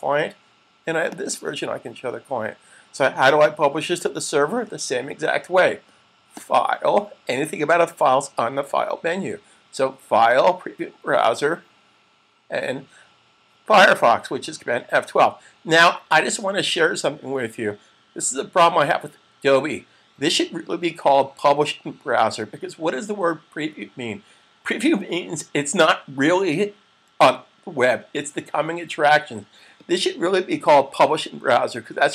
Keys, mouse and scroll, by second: 6.4 click.